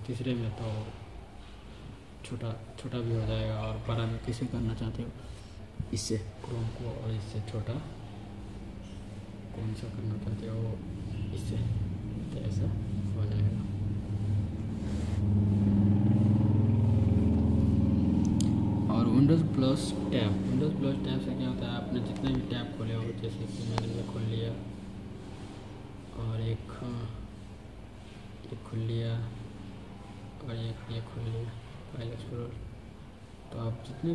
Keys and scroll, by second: 1.8 super+z.